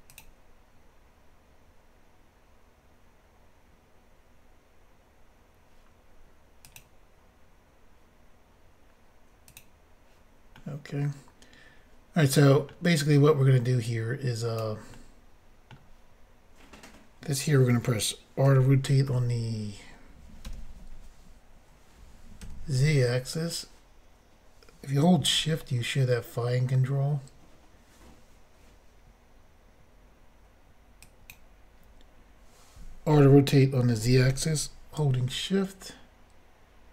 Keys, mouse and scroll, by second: 0.1 click, 0.2 click, 6.7 click, 9.5 click, 10.6 middle click, 13.9 click, 14.9 middle click, 18.5 r, 19.1 y, 22.4 z, 31.0 shift+click, 33.2 r, 34.0 z.